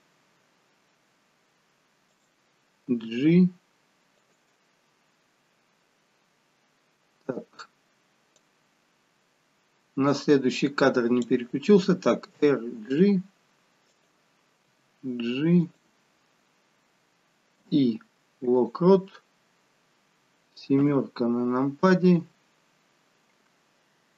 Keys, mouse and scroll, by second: 2.8 g, 8.4 click, 12.3 r, 14.7 g, 17.6 i, 20.7 KP_7.